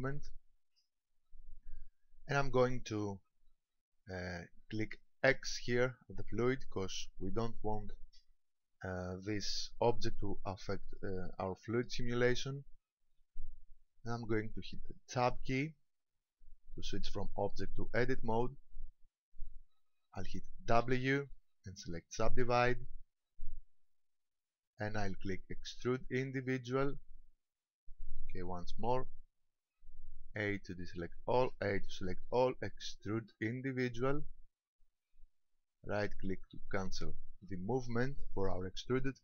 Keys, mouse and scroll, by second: 6.4 click, 15.3 Tab, 20.8 w, 26.3 click, 28.9 a, 32.6 a, 33.1 click.